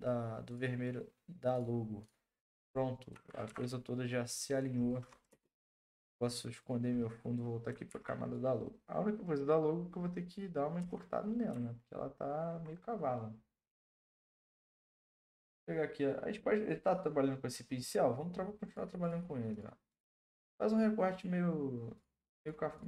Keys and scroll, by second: 3.4 ctrl+t, 5.3 Return, 7.9 ctrl+t, 10.8 Return.